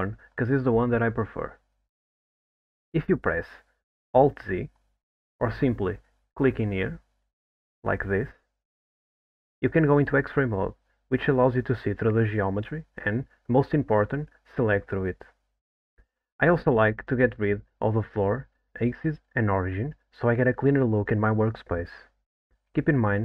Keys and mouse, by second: 2.2 click, 3.5 click, 4.3 alt+z, 6.5 click, 7.6 click.